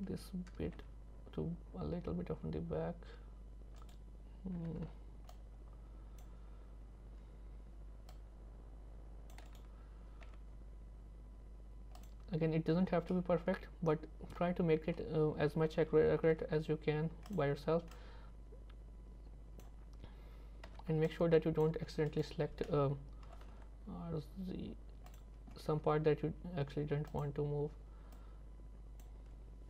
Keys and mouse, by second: 0.8 g, 4.6 c, 10.3 g, 12.8 z, 13.2-15.0 middle drag, 17.3-19.7 drag, 20.7 c, 23.3 r, 25.8 g, 28.2 click.